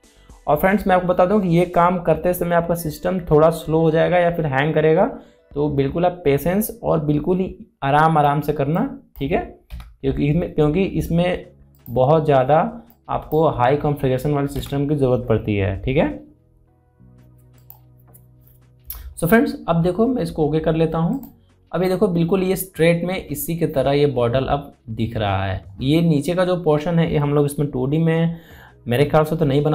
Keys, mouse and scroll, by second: 9.5-16.7 drag, 18.3 click, 21.8 click, 22.5-23.2 alt+scroll up 1, 23.9-24.8 scroll down 1, 25.8-26.1 scroll up 1, 26.5 scroll down 1.